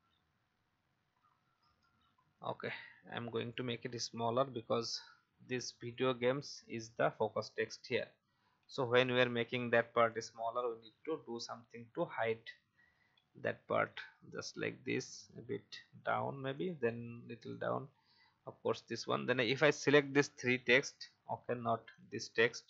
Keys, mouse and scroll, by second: 2.1 shift+Up, 2.6 shift+click, 4.2 alt+Up, 5.9 click, 6.1 Up, 6.6 Up, 7.6 Up, 7.6-11.0 drag, 12.4 Down, 12.6 Down, 15.9 Down, 16.5 click, 16.8 Down, 17.1 Down, 17.5 click, 17.9 Down, 18.1 Down, 18.9-20.1 drag, 21.1-21.7 scroll up 1, 21.9 shift+click.